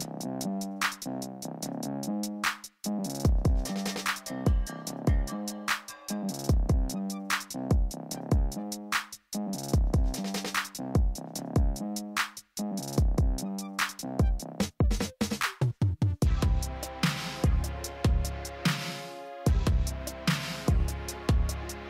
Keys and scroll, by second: 9.2 f.